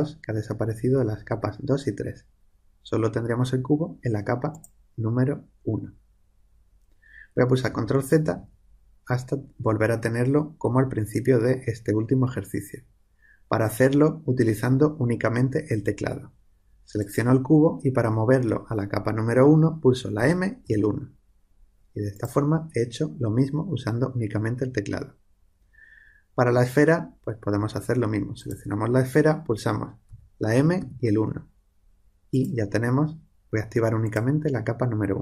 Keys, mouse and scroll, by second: 4.4-6.3 drag, 7.7 ctrl+z, 8.2 ctrl+z, 17.0-18.8 drag, 20.1 m, 22.1-24.0 drag, 28.3-30.8 drag, 30.0 m, 32.3-35.2 drag.